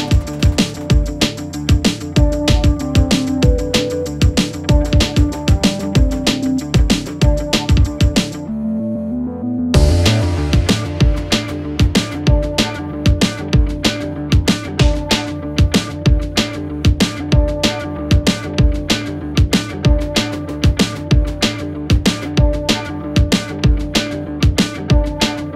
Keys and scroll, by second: 4.2 Delete, 19.3 ], 22.4 Delete, 25.1 4.